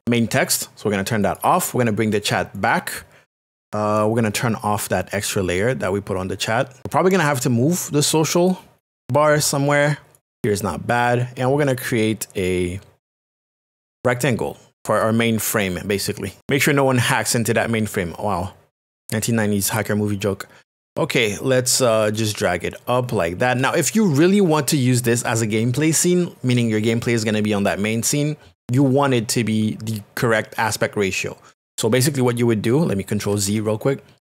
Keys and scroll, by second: 33.3 ctrl+z.